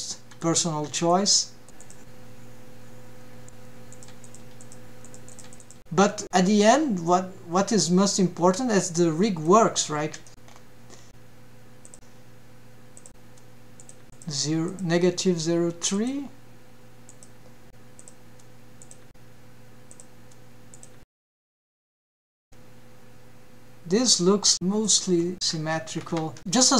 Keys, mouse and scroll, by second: 0.9 click, 1.6 click, 2.2 click, 4.5 click, 4.8 click, 5.2 click, 5.6 click, 5.9 click, 6.4 click, 6.6 click, 8.3 click, 8.5 click, 8.7 click, 8.9 click, 9.1 click, 9.6 click, 10.6 click, 11.2 scroll down 1, 11.2 KP_1, 11.2-12.0 scroll down 5, 13.6 click, 14.4 click, 16.1 click, 16.7 click, 17.9 click, 19.1 click, 20.4-23.3 drag.